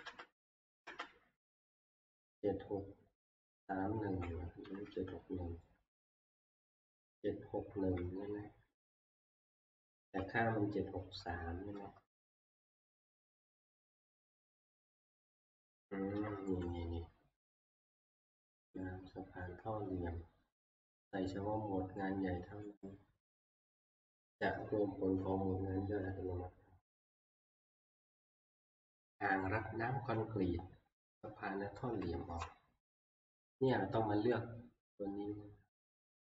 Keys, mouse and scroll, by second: 0.0 Right, 0.0 ctrl+Up, 0.5 ctrl+Up, 0.9 ctrl+Up, 2.2 Down, 2.7 Down, 2.9 Down, 3.5-4.2 Down, 4.6-9.3 Right, 7.9 Down, 8.5-9.3 Down, 10.2-11.1 Down, 12.8 Up, 16.1 Right, 18.8 click, 22.8 click, 27.4 Left, 27.7 click, 28.8 Left, 32.0 Down, 33.5 middle click, 33.5-34.3 scroll down 1.